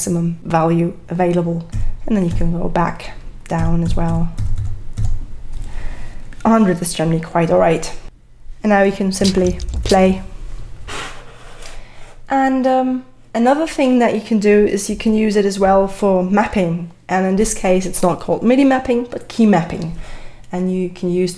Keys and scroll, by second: 1.7 c, 3.6 c, 4.4 v, 9.0-11.4 typing.